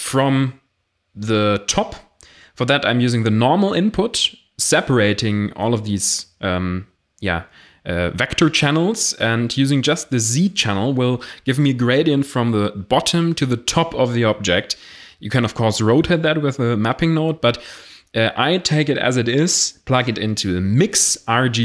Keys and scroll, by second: 5.4 shift+a, 6.7 m, 6.9 i, 7.0 x.